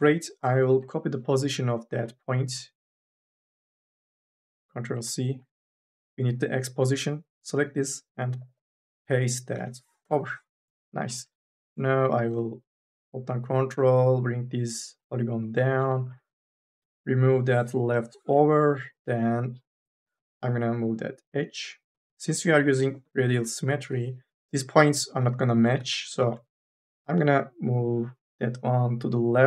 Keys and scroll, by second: 0.6 1, 5.1 ctrl+c, 9.7 ctrl+v, 9.9 Return, 11.2 3, 15.9 2, 17.1 3, 17.8 Delete, 18.5 1, 18.8 2, 24.0 1, 24.5 ctrl+z, 26.4 ctrl+z.